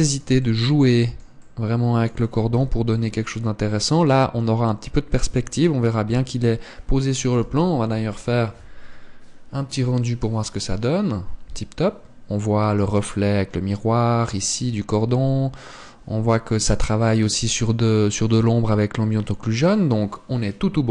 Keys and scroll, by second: 3.3 KP_0.